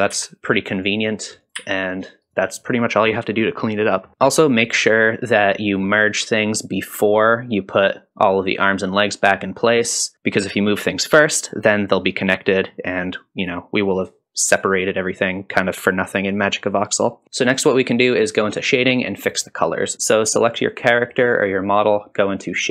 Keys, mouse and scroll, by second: 0.1 g, 1.4 click, 1.6 g, 2.7-3.2 scroll down 2, 3.8-4.1 scroll down 1, 4.1 middle click, 4.1 KP_Decimal, 17.2 ctrl+s, 17.2 click.